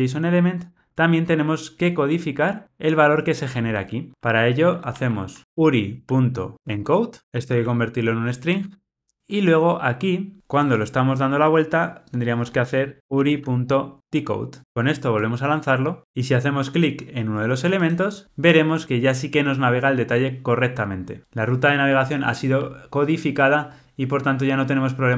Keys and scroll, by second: 8.8 Return, 14.0 Return, 15.3 ctrl+r.